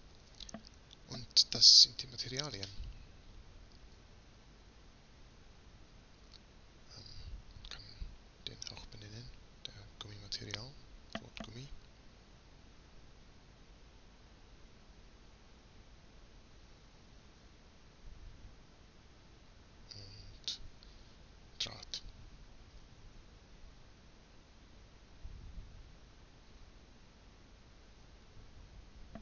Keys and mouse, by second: 4.4-5.8 right drag, 9.1-13.0 drag, 9.1 BackSpace, 13.0 m, 16.5-17.9 right drag, 17.9-19.7 middle drag, 19.7 BackSpace, 25.6-26.7 right drag, 26.7 middle click, 28.6-29.2 right drag.